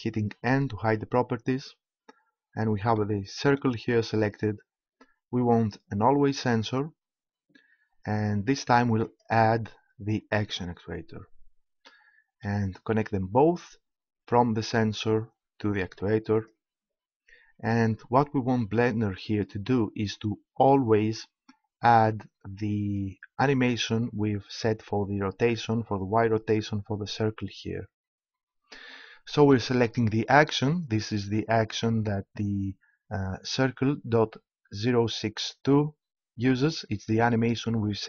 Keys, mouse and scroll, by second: 0.8 n, 3.0-5.4 middle drag, 5.4-7.2 drag, 9.0-10.7 drag, 14.3-16.0 drag, 21.9-24.0 drag.